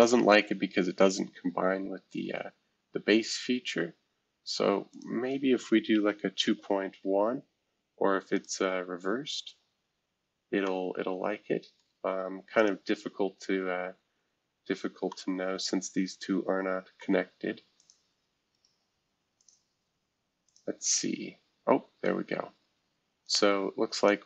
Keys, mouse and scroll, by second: 2.1-3.5 middle drag, 4.9-6.6 drag, 6.6 1, 7.0 Tab, 8.3-9.9 drag, 10.6-12.6 middle drag, 12.6-14.2 drag, 14.6-15.1 scroll up 1, 15.1-17.8 middle drag, 17.8 click, 19.3 click, 20.4 click, 23.2 click, 23.9 click.